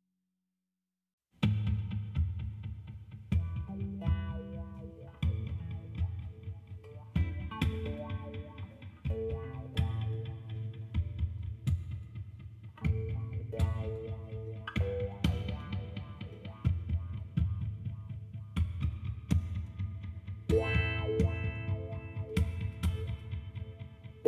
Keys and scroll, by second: 2.7 ctrl+r, 9.1 ctrl+r, 9.8 2, 10.5 Return, 23.7 Tab.